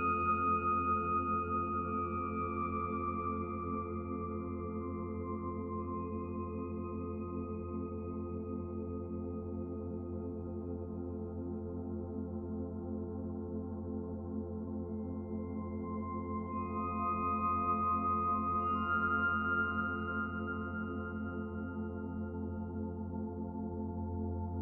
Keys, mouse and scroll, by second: 1.0 click, 3.9 click, 7.3 click, 10.8 middle click, 12.7 click, 14.1 click, 17.9 click, 21.1 click, 23.4 click.